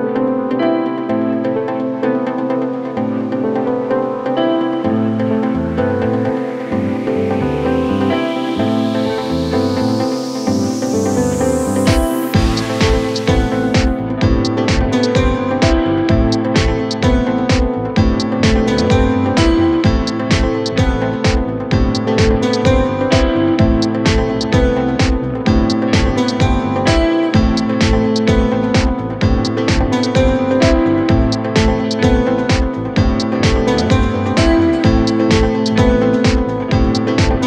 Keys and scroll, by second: 16.7 ctrl+r, 30.2 c, 30.4 e, 30.7 Escape, 36.6 shift+Page_Down.